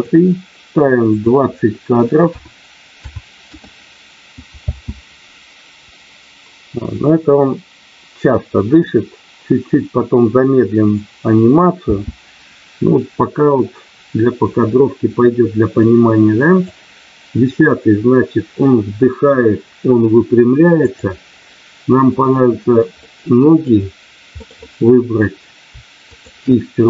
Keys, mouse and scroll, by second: 1.0-3.5 drag, 4.5 space, 11.9 space, 15.8 click, 20.8 click, 22.9 middle click, 24.3 middle click, 24.5 middle click, 26.1 shift+click.